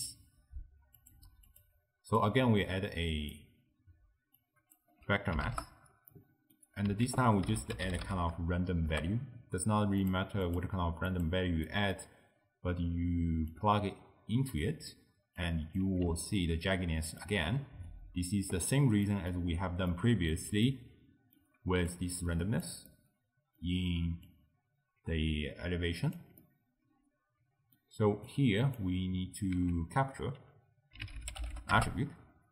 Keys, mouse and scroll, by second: 1.0-2.4 drag, 4.4-6.2 drag, 6.2-7.1 middle drag, 7.1 ctrl+a, 10.5-11.7 drag, 11.7-13.6 middle drag, 13.6 drag, 15.4 click, 16.3-19.6 ctrl+middle drag, 19.6-19.9 scroll down 4, 19.9-21.9 middle drag, 21.9 click, 22.9-24.3 middle drag, 24.3 click, 26.4-28.3 middle drag, 28.3 click, 29.6 ctrl+a.